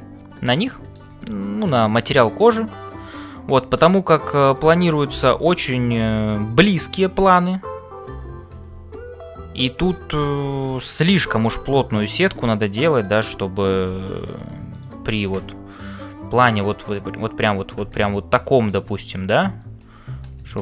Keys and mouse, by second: 0.0-20.6 typing, 0.8 shift+middle click, 2.9 middle click, 4.5 click, 7.0 click, 10.6 click, 17.9-18.9 middle drag.